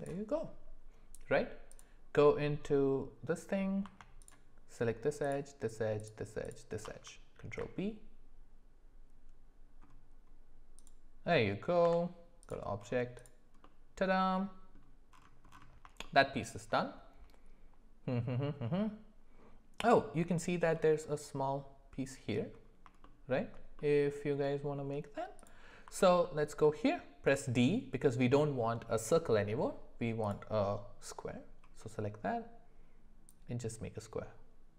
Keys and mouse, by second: 1.8 click, 6.0 alt+shift+click, 7.3 ctrl+b, 11.8 Tab, 13.6-14.7 middle drag, 16.0 shift+middle click, 23.0 shift+middle click, 23.8 middle click, 26.0 alt+middle click, 27.2 d, 33.4-34.7 drag.